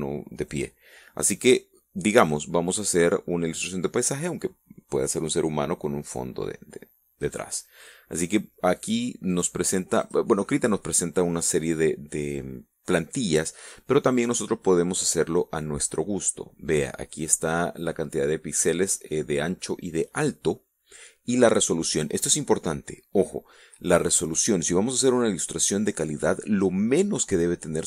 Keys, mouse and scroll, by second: 8.9 click, 9.4 click, 10.2 click.